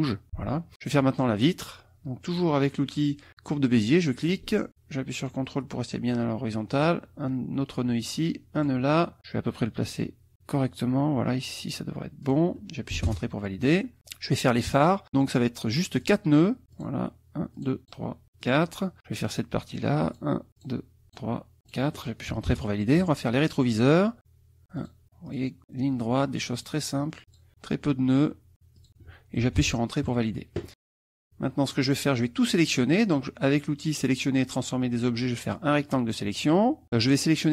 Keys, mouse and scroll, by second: 4.0 click, 6.8 ctrl+click, 8.6 click, 12.2 click, 13.1 Return, 16.0 click, 16.7 click, 17.6 click, 18.4 click, 20.1 click, 20.6 click, 21.1 click, 21.6 click, 22.5 Return, 24.8 click, 25.3 click, 26.6 click, 27.3 click, 28.8 click, 29.6 Return, 30.7 click, 31.7 click, 35.9 click.